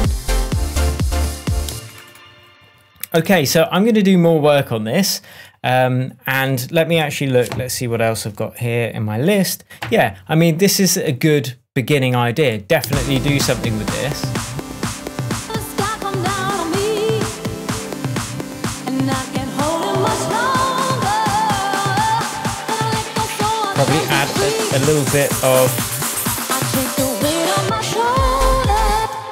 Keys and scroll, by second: 1.6 space, 3.2 super+s, 12.8 space, 28.5 super+c, 28.9 super+space.